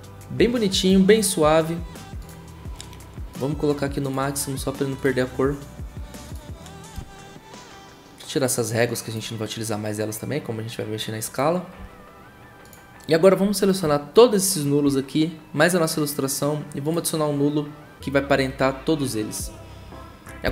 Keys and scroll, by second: 20.4 s.